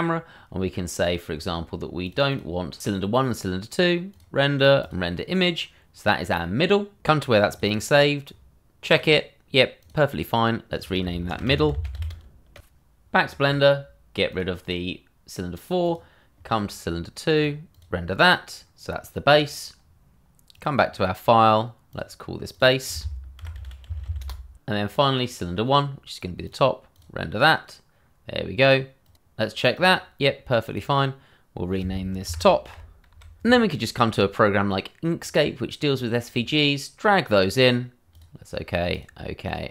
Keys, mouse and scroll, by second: 2.0 click, 2.4 double click, 4.1 click, 7.7 double click, 8.9 click, 11.3-11.9 typing, 12.2 click, 12.7 click, 14.3 click, 17.8 double click, 20.5 click, 23.4 shift+b, 23.5 a, 23.8 s, 24.0 e, 24.2 Return, 24.2 click, 25.3 double click, 26.4 click, 28.7 double click, 29.0 click, 29.1 double click, 29.7 click, 32.2 shift+t, 32.7 o, 32.9 click, 33.1 p, 33.4 Return, 35.2 click.